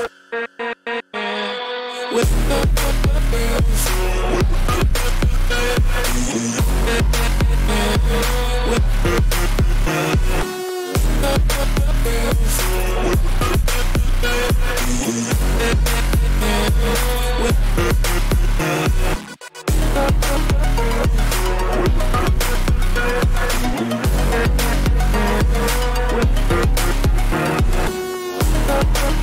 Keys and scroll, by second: 7.6 ], 10.6 [, 11.7 ], 17.7 ctrl+t.